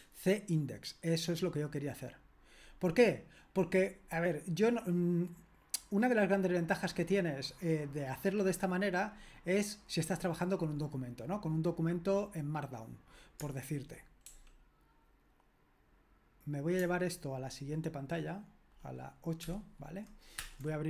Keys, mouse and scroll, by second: 14.2 super+l, 19.5 super+(, 20.4 super+Return.